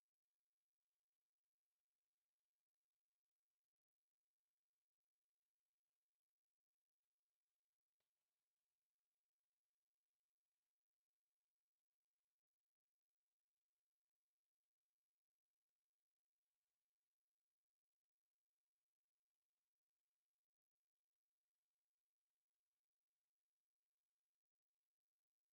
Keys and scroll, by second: 2.7 Escape, 3.0-4.3 typing, 4.1 Return, 4.5 Return, 4.9 Escape, 7.5 m, 7.6 space, 8.1 F8, 8.8 Escape, 9.5 m, 9.6 space, 12.2 e, 12.4 Escape, 12.5 e, 12.6 space, 13.2 Escape, 13.9 m, 14.0 space, 19.2 Escape, 21.0 Escape, 22.0 F8, 24.0 Escape.